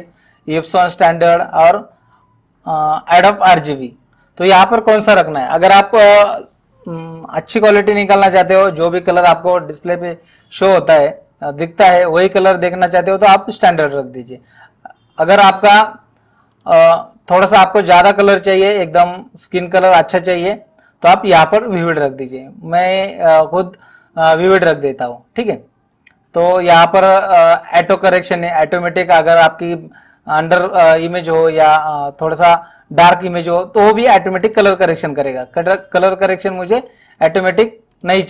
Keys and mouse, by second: 16.6 click, 26.6 click, 34.5 click.